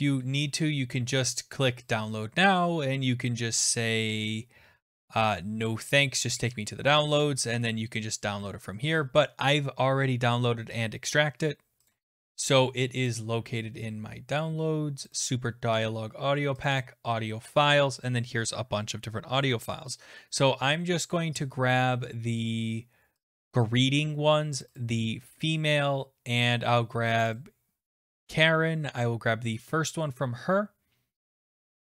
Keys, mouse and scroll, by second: 0.0 click, 2.0 click, 6.5 click, 11.9 click, 13.2 click, 15.1 click, 15.2 click, 16.7 click, 16.8 click, 23.3 click, 23.4 click, 24.6 click, 24.8 click, 27.2 click, 27.4 click, 28.3 click.